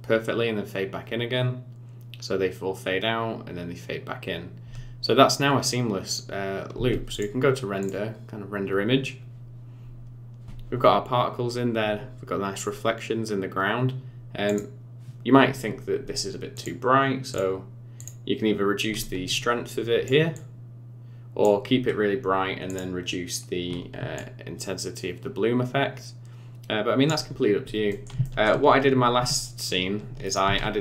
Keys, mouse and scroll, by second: 6.7 space, 7.1 click, 14.5 click, 16.5 click, 17.3 click, 18.0 click, 19.2 click, 20.3 click, 22.7 click, 24.1 click, 27.3-27.9 scroll down 5, 27.9 middle click, 28.2 shift+middle click, 30.2 shift+right click, 30.4 shift+a.